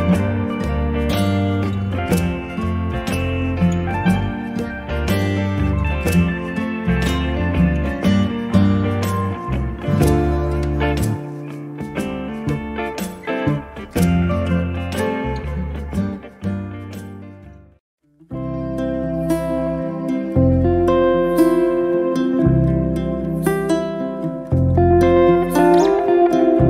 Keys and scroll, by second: 26.5 1.